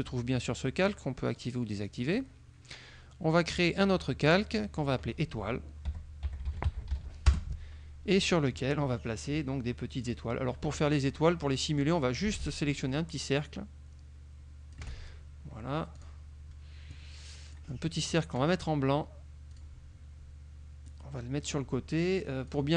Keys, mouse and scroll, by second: 0.9 click, 1.4 click, 2.2 click, 3.6 click, 4.6 click, 6.1-7.5 typing, 8.3 click, 10.1 click, 10.6 click, 12.5-15.0 ctrl+shift+drag, 16.0 click, 17.0-18.3 drag, 19.6 click, 21.0 click, 22.6 click.